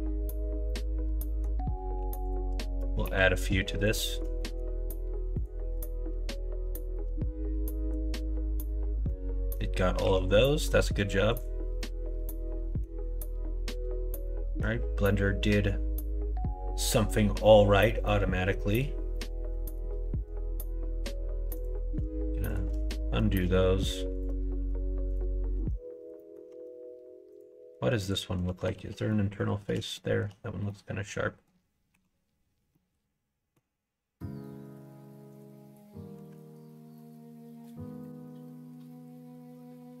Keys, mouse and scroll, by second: 0.6 middle click, 2.2 click, 3.0 2, 3.3 click, 4.4 middle click, 5.3 shift+click, 6.9 middle click, 9.0 middle click, 10.0 q, 11.8-12.8 middle drag, 14.2 middle click, 18.0 middle click, 19.2 middle click, 22.5 shift+click, 22.8 middle click, 24.1 shift+click, 24.5 q, 25.5 Tab, 26.1 middle click, 26.5 Tab, 27.3 click, 28.0 click, 28.7 alt+z, 29.0 middle click, 29.9 shift+middle click, 30.6 middle click, 31.9 3, 32.7 middle click, 35.3 click, 35.8 middle click, 36.6-40.0 middle drag.